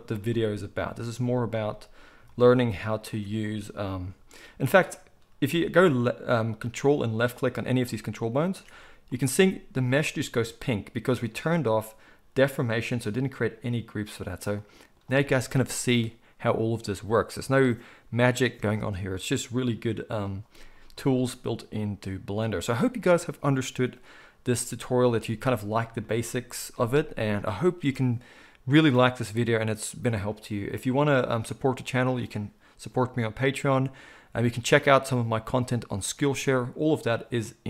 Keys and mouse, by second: 3.1-7.1 ctrl+middle drag, 3.9 g, 7.1 ctrl+click, 7.2 ctrl+middle click, 7.8 ctrl+click, 7.9 ctrl+middle click, 8.3 ctrl+click, 8.4-37.6 ctrl+middle drag.